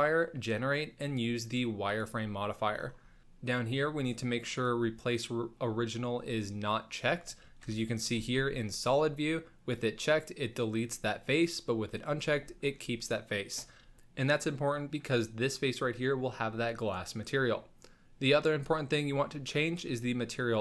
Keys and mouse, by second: 4.6 click, 7.6 KP_1, 8.3 z, 8.6-9.1 middle drag, 10.1 click, 11.9 click.